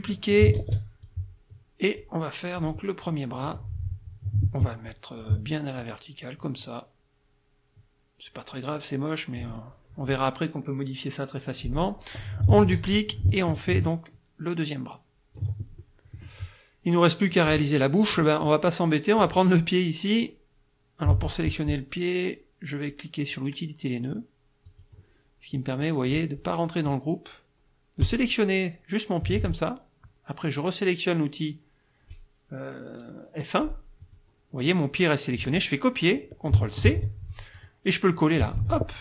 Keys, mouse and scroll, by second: 0.6 ctrl+d, 1.0-2.2 ctrl+drag, 2.6 click, 3.5-5.4 drag, 5.8-9.7 ctrl+drag, 12.6 ctrl+d, 13.1-15.6 ctrl+drag, 15.8 ctrl+middle click, 19.2 click, 24.7 click, 28.0 click, 34.0 click, 36.9 ctrl+c, 37.6 click, 38.6 ctrl+v.